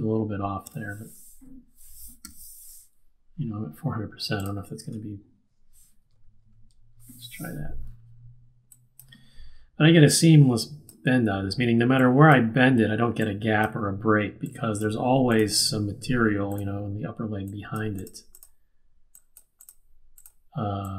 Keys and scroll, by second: 2.2 q, 4.8 Return, 6.0 Return, 6.1 Right, 6.3 Right.